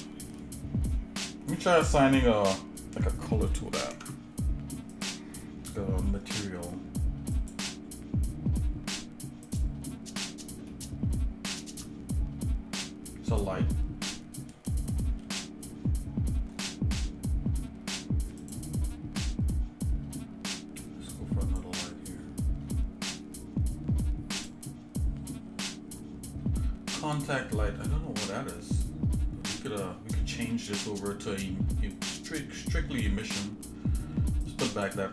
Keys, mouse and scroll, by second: 3.3 middle click, 3.9 ctrl+Tab, 7.4-9.8 drag, 10.7 shift+middle click, 15.8 scroll down 2, 16.5 scroll up 2, 18.4 click, 21.6-24.6 drag, 29.6-32.1 drag, 33.3 click.